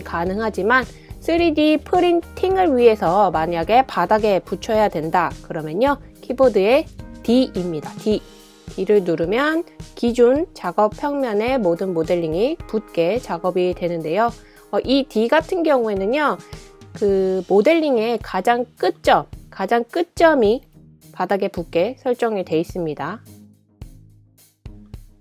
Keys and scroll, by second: 7.2 d, 7.5 d, 8.9 d, 9.2 d, 12.9 typing, 19.6 d, 19.8 d, 24.8 BackSpace.